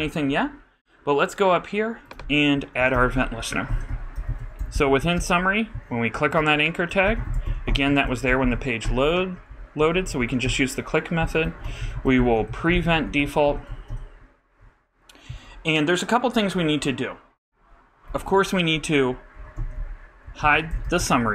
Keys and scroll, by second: 3.1 shift+Return, 3.2-4.4 typing, 6.1 super+a, 6.3 super+Right, 6.9 super+., 7.3-10.2 typing, 10.4 shift+Return, 12.1-14.2 typing, 19.1-20.2 typing.